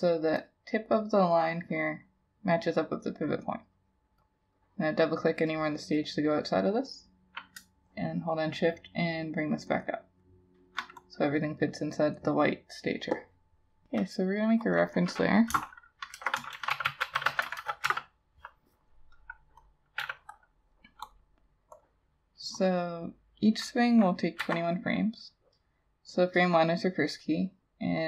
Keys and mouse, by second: 6.1 double click, 7.6 shift+click, 9.5 shift+click, 14.8 double click, 15.6-17.6 typing, 17.9 Return, 19.3 double click, 20.0 e, 24.4 F7.